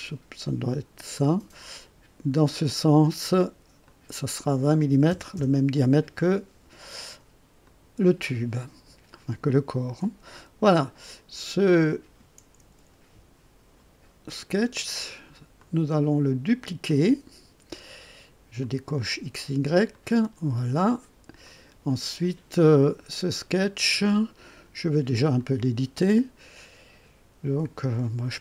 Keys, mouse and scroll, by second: 2.3 click, 3.8 click, 4.9 KP_2, 5.1 KP_0, 5.3 KP_Enter, 7.6 click, 9.1-10.9 drag, 11.7 click, 15.5 click, 16.8 click, 18.6 click, 19.9 click, 21.4 click, 25.2 click.